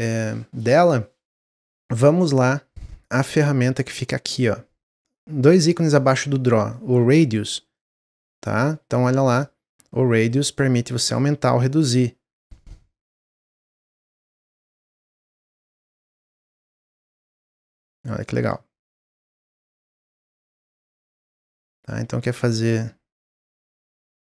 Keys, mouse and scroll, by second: 7.6-8.8 drag, 10.2 click, 13.7 click, 14.5 click, 16.4 click, 19.6 click, 20.6-22.3 middle drag, 22.3 click, 23.9 click.